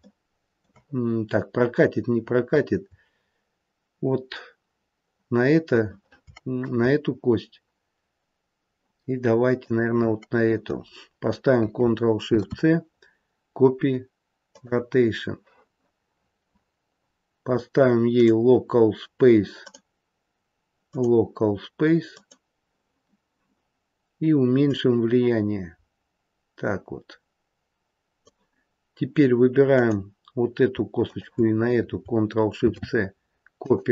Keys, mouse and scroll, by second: 9.6 shift+click, 12.2 ctrl+shift+c, 16.1-18.1 scroll down 8, 18.1 click, 20.8 click, 24.6 click, 29.6 click, 31.0 shift+click, 32.5 ctrl+shift+c.